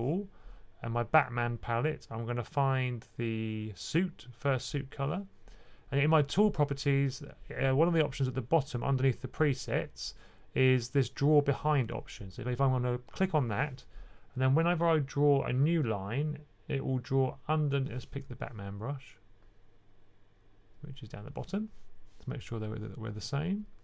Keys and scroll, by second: 18.0 super+z.